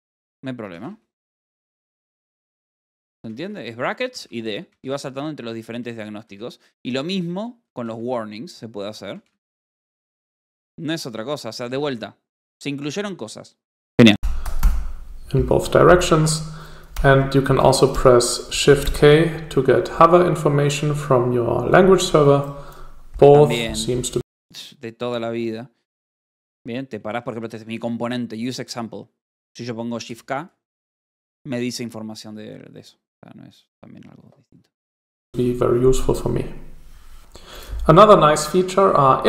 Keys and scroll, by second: 0.4 d, 1.2 [, 6.3 m, 6.9 Escape, 7.6 j, 10.2 k, 11.2 u, 12.1 s, 27.1 j, 27.8 h, 30.6 k.